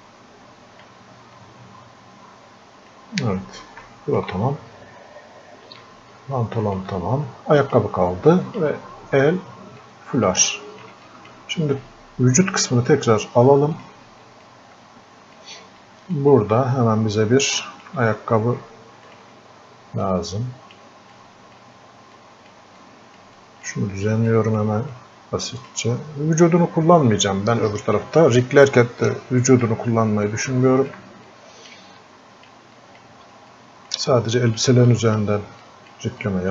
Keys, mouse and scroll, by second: 1.4-3.9 drag, 3.9-6.1 alt+drag, 6.1-7.6 drag, 9.1 scroll up 1, 9.8 click, 13.8-15.9 drag, 15.9 click, 16.5 scroll up 1, 16.9-17.5 scroll down 1, 17.6 alt+click, 20.1 click, 21.2 click, 22.2-29.0 drag, 29.0 click, 30.3 click, 31.3 click, 32.1-36.5 alt+drag.